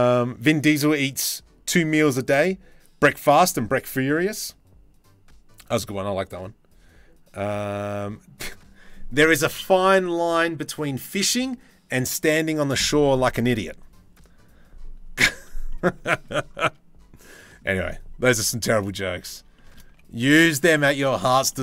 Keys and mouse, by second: 15.3 click, 15.7 shift+middle click, 17.0 middle drag, 19.2 shift+middle drag, 19.5 z, 20.4 z, 21.1 click.